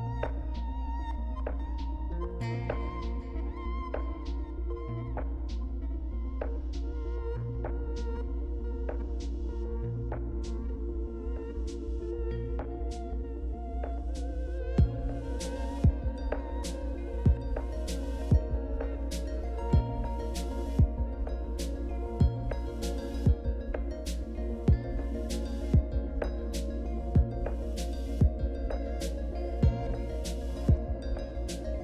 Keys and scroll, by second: 15.1 c, 20.0 #, 21.7-25.5 typing, 26.2 Return, 26.5 Return.